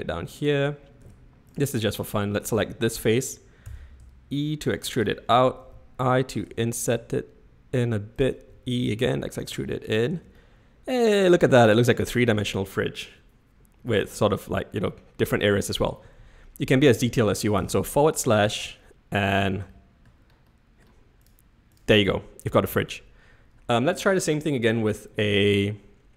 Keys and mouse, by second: 1.0 3, 2.6 click, 3.6 e, 5.6 i, 8.5 e, 10.1 Tab, 10.4-11.7 middle drag, 14.9-15.4 middle drag, 17.6 /, 18.6-19.4 shift+middle drag, 19.8 shift+middle drag, 20.5-20.9 middle drag, 21.7 drag, 22.2-22.7 shift+drag.